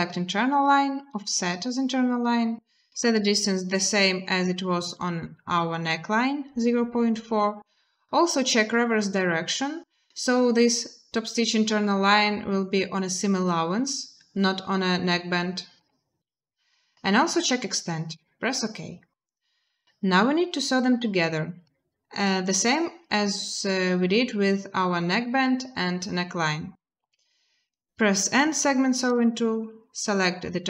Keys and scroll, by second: 26.8 n.